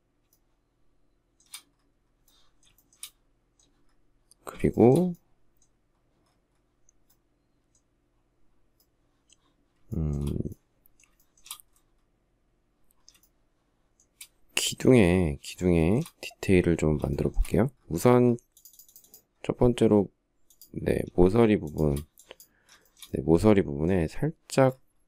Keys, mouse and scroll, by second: 4.1 shift+middle click, 9.3 shift+middle click, 10.5 shift+middle click, 10.7 shift+middle click, 12.6 shift+middle click, 14.9 shift+middle click, 16.5 shift+middle click, 21.0 shift+click, 22.2 shift+middle click.